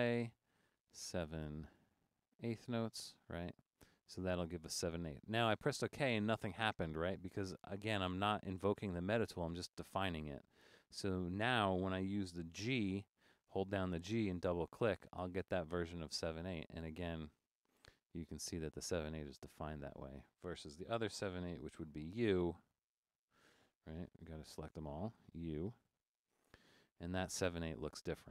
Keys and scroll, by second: 13.6-14.8 typing, 22.8-23.9 typing, 25.5-26.0 typing, 27.7 typing.